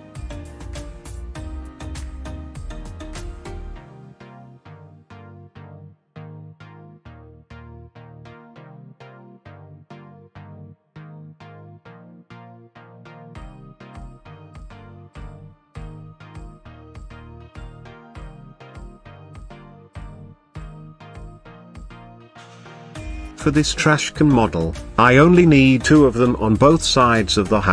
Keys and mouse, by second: 0.5 click, 1.0 shift+r, 1.2 shift+r, 1.6 shift+r, 1.8 shift+r, 3.2 shift+click, 3.6 s, 4.7 click, 5.3 click, 5.5 s, 5.8 drag, 6.3 click, 6.5 s, 6.8 click, 7.7 click, 8.0 s, 8.4 drag, 8.9 s, 9.5 click, 10.1-10.7 middle drag, 11.3-13.0 middle drag, 13.5-14.0 shift+middle drag, 14.5 click, 15.3-15.6 middle drag, 17.1-17.7 middle drag, 19.1-20.3 drag, 25.8 g, 26.2 shift+z, 27.4 click.